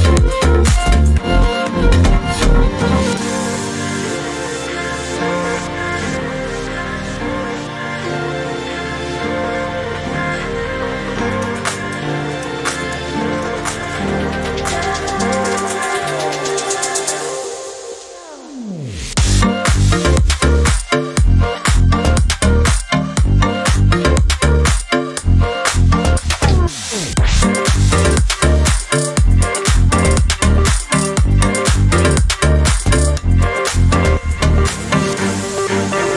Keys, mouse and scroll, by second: 0.3-1.4 shift+drag, 1.7-3.5 shift+drag, 4.4 click, 5.4 click, 6.4-7.5 ctrl+scroll down 8, 8.7 click, 10.4 click, 11.2 shift+click, 12.9 ctrl+g, 14.7 shift+click, 15.9 ctrl+g, 16.9 click, 17.8 space, 18.4-20.5 drag, 20.8 KP_5, 22.5 click, 23.2-23.6 ctrl+scroll up 2, 24.0 ctrl+click, 26.0-27.2 ctrl+shift+drag, 28.0-29.8 drag, 30.1 Right, 32.5 click, 33.2 KP_5, 35.5-36.1 ctrl+scroll up 2.